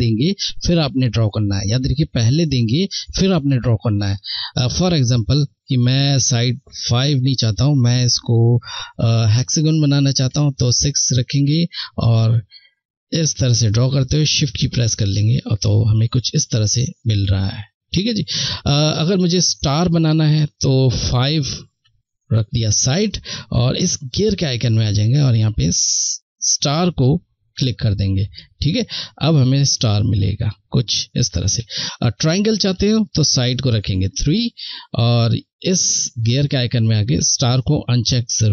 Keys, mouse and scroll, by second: 3.1 ctrl+Num_Lock, 3.3 ctrl+z, 6.1 click, 12.4 click, 16.5 ctrl+z, 19.9 click, 23.4 click, 28.4 shift+click, 30.6 ctrl+z, 32.0 click, 34.7 click, 34.9 click.